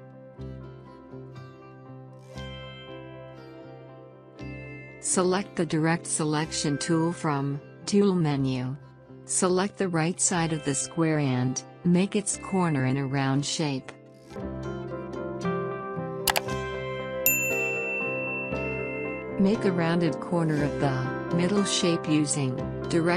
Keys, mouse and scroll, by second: 18.3 alt+scroll up 1, 19.0 alt+scroll up 1, 19.6 space, 19.8 click, 20.5 alt+scroll up 2, 21.5 scroll down 2, 22.4 alt+scroll up 2, 22.8 click.